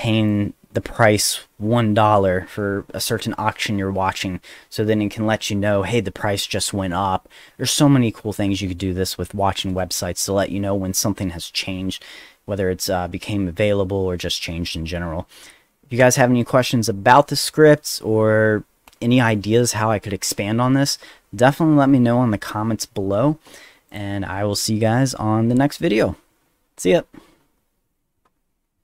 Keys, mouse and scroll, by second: 0.3 click, 23.9 click.